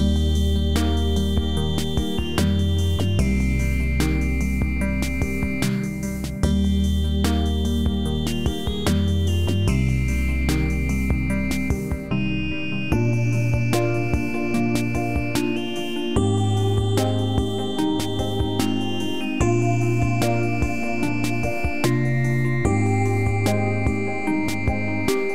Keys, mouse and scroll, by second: 2.1 ctrl+z, 2.9-4.5 drag, 10.4-13.5 drag, 18.5-19.7 scroll up 1, 19.7-20.3 click, 20.6 scroll up 1, 21.3 alt+middle click, 23.1 click.